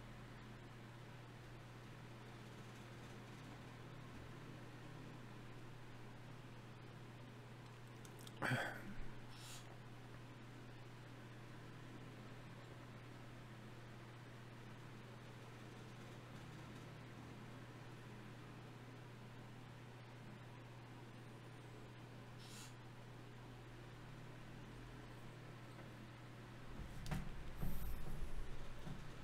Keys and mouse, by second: 0.3-9.5 middle drag, 9.5-12.5 drag, 12.5 shift+q, 16.0-17.7 drag, 17.7-19.1 right drag, 20.7 g, 21.9 click, 22.8 g, 25.0 g, 28.8-29.2 middle drag.